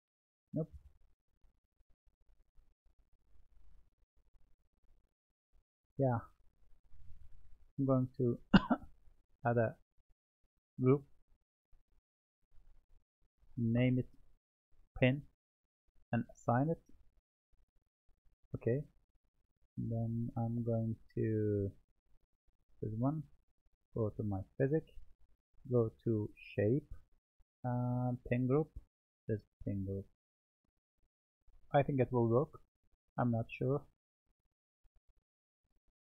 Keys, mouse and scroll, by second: 0.6-1.5 scroll up 1, 1.5-3.0 middle drag, 3.0 click, 6.0-6.5 scroll down 2, 6.5-8.2 middle drag, 8.2 click, 9.7-10.8 drag, 11.8 click, 12.0-15.1 drag, 17.1-20.3 drag, 22.1 Tab, 23.7 click, 24.7-26.3 scroll down 10, 26.3 click, 26.8-28.2 scroll down 3, 28.2-29.7 drag, 29.7-31.8 middle drag, 31.8-34.0 drag, 34.0-34.4 scroll down 3, 34.4-35.0 middle drag, 35.0-36.0 scroll up 2.